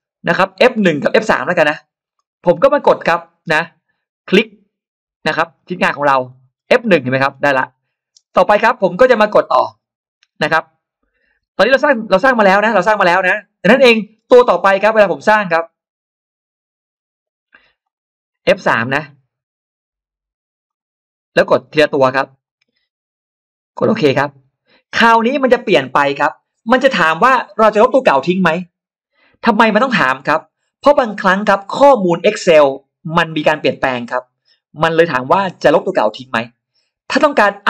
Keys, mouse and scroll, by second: 2.0 middle click, 5.4 click, 6.1-6.7 scroll up 1, 7.1-7.7 scroll down 1, 13.6-13.9 scroll up 2, 15.4 click, 17.7 click, 20.5 click, 21.5 click, 22.3 click, 24.0 click.